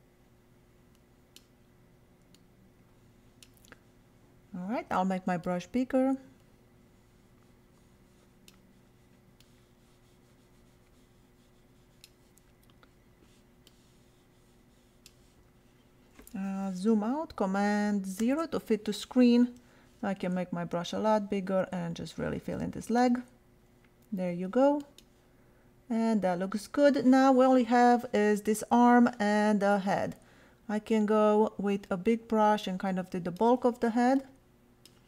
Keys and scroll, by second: 4.7 ], 18.2 super+0, 19.6 ].